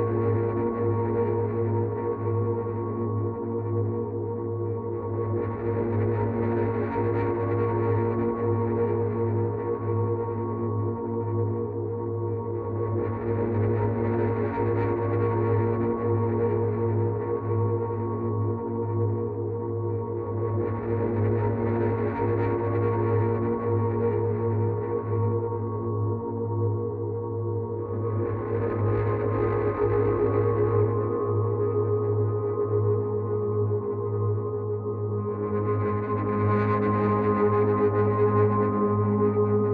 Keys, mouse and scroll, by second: 5.2 click, 9.3 click, 15.4 click, 18.9 click, 22.3 click, 26.4 click, 27.6 click, 35.9 click.